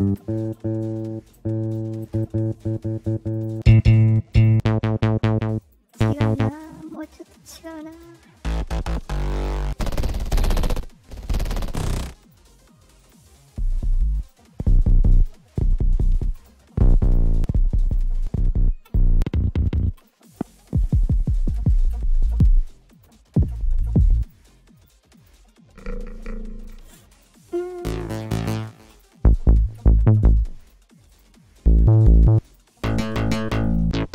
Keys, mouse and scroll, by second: 0.9 click, 3.3 click, 4.2 click, 5.5 click, 6.4 click, 6.8 click, 7.8 click, 9.3 click, 10.6 click, 12.1 click, 12.9 click, 14.1 click, 15.0 click, 16.2 click, 17.0 click, 17.8 click, 18.8 click, 19.9 click, 20.2 click, 22.8 click, 24.1 click, 24.7 click, 25.1 click, 26.5 click, 27.0 click, 28.8 click, 30.5 click, 31.0 click, 32.4 click, 33.5 click.